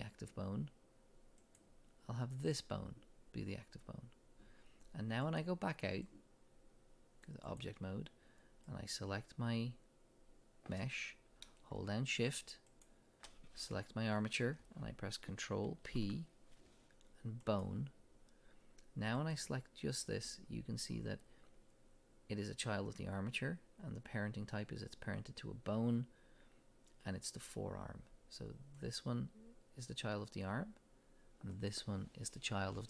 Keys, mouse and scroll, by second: 5.2-8.9 drag, 12.7 shift+click, 15.8 ctrl+p, 19.2 click, 28.8 click, 31.5 click.